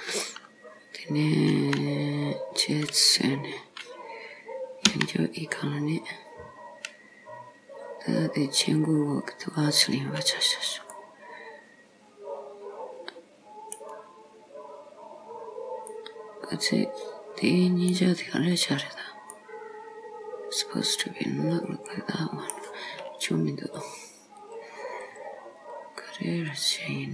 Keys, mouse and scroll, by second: 0.5 scroll down 2, 1.6 s, 4.9 e, 11.0 middle click, 14.1-14.4 scroll up 5, 15.5 scroll up 1, 16.0 middle click, 18.4-18.8 scroll down 3, 19.4 middle click, 23.9 click, 25.1 click, 26.6 click.